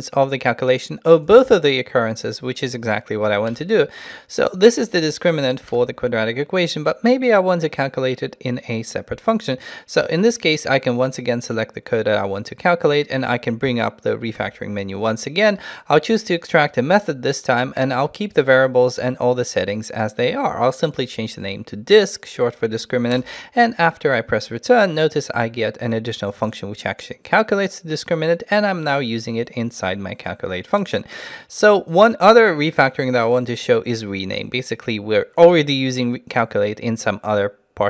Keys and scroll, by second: 14.4 ctrl+alt+shift+t.